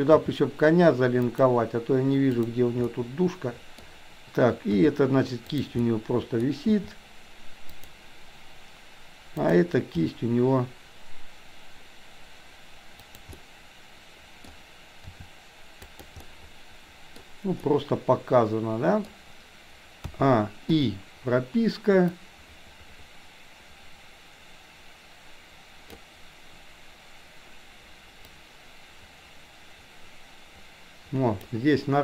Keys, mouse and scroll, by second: 0.2 g, 2.3 click, 2.8-3.9 middle drag, 4.7 r, 5.8 middle click, 6.7 r, 9.4 click, 9.9 g, 13.3-14.5 middle drag, 15.0 r, 16.3 middle click, 17.5-19.0 middle drag, 20.0 a, 20.7 i, 22.2-26.0 drag, 28.3-31.5 drag.